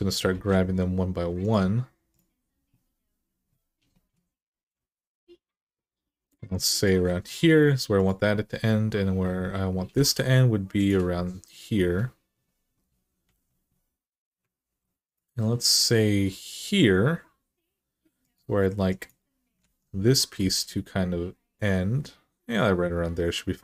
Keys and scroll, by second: 0.1 g, 4.3 g, 9.6 g, 13.1 alt+z, 14.4 ctrl+r, 19.4 alt+z, 20.2 g.